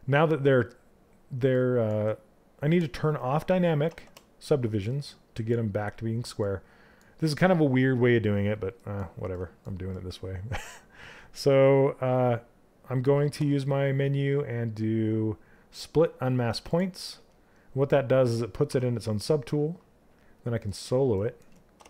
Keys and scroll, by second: 3.4 shift+d.